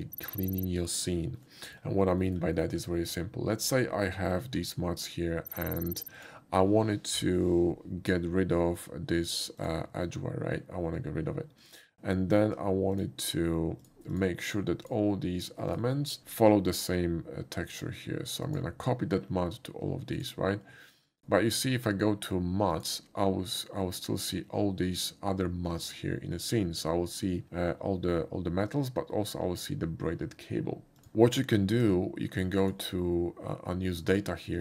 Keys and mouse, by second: 1.4 middle click, 2.2 shift+middle click, 2.6 shift+middle click, 4.2 shift+middle click, 5.4 middle click, 6.2 click, 7.5 n, 9.6 click, 11.6 click, 12.9 shift+click, 13.8 shift+drag, 14.1 shift+click, 14.5 shift+click, 14.8 shift+click, 15.7 shift+drag, 16.2 shift+click, 17.7 shift+click, 18.5 shift+click, 20.2 click, 21.1 click, 22.8 click, 31.0 click, 31.4 click, 32.6 click, 34.1 click.